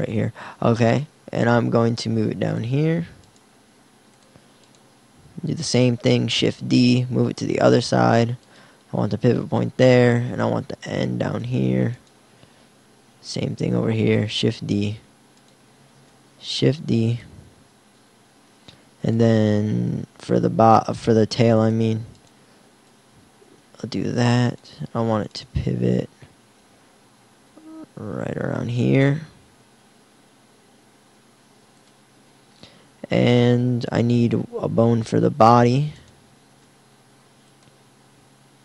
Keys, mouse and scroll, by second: 0.6 g, 2.6 click, 3.6 g, 5.6 shift+d, 12.6 shift+d, 15.9 shift+d, 20.5 shift+d, 21.7-23.1 drag, 26.4 g, 27.4 g, 31.9-33.8 drag, 36.4 shift+d, 38.0 r.